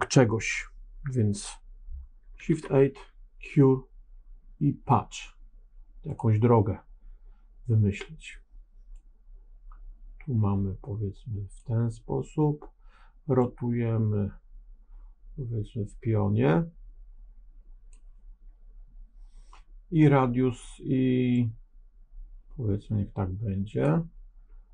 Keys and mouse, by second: 2.4 shift+a, 8.8-11.5 drag, 13.3-17.8 drag, 21.2-23.7 drag.